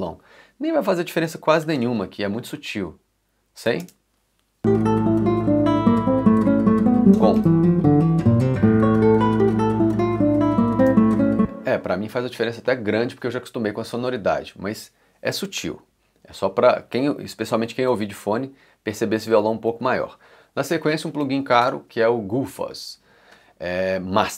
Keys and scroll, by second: 1.6 ., 3.8 space, 10.8 space, 19.6 2, 19.8 3.